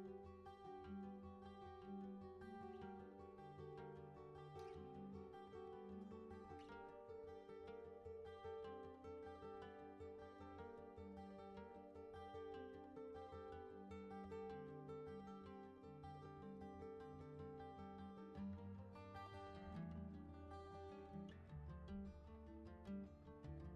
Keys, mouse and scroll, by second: 12.5-13.7 drag, 15.2 click, 18.0-20.0 drag, 21.7-23.7 drag.